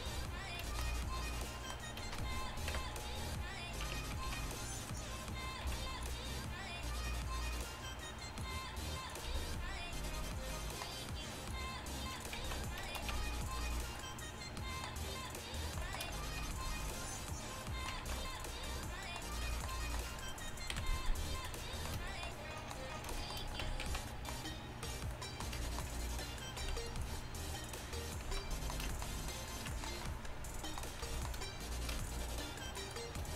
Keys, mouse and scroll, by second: 0.0 Tab, 2.8 KP_1, 3.9 Tab, 4.3 z, 5.7 b, 8.5-10.9 drag, 9.3 b, 11.6-12.7 drag, 12.5 z, 13.2 Tab, 16.5 q, 18.2 ctrl+z, 20.8 KP_1, 23.7 Tab, 23.9 z, 24.9-26.1 middle drag, 26.7 middle click, 26.7 b, 27.3 middle click, 27.7 click, 28.3 z.